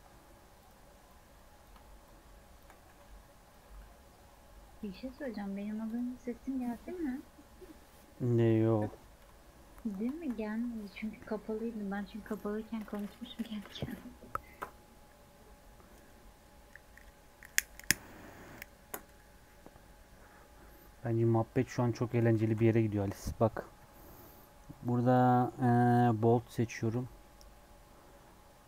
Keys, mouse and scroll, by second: 0.5 click, 2.0 shift+click, 2.8 s, 3.6 s, 4.9 Tab, 5.2 alt+z, 5.3 scroll down 2, 5.4 middle click, 5.8 click, 6.1 scroll up 1, 6.2-8.1 middle drag, 8.1 scroll up 1, 8.4 click, 9.1 KP_7, 9.8 scroll down 3, 10.1 shift+middle click, 22.0 click, 22.4 shift+a.